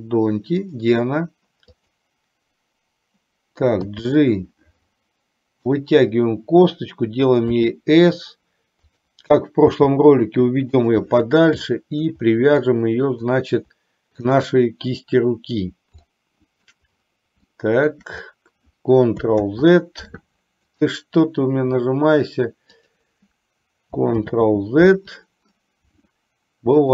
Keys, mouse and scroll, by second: 0.7 click, 1.8 click, 4.0 g, 7.7 s, 9.8 g, 11.8 shift+middle click, 12.7 scroll up 2, 12.8 middle click, 14.5 shift+click, 16.2 middle click, 17.6 shift+middle click, 19.5 z, 23.1 click, 24.3 ctrl+z.